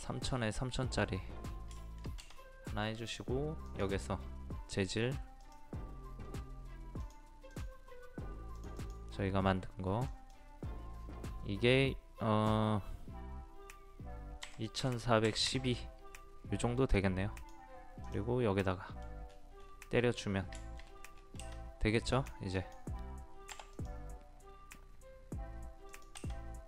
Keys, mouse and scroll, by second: 0.7 middle click, 1.2-1.5 scroll up 1, 1.8 shift+middle click, 3.7 click, 14.4 KP_2, 14.8 KP_4, 15.2 KP_1, 15.5 KP_2, 16.9 click, 18.6 middle click, 19.3-19.9 scroll up 2, 19.9 scroll down 1, 20.5 middle click, 20.8 scroll down 1, 21.0 scroll up 1, 21.1 scroll down 1, 22.1 click, 23.5 typing.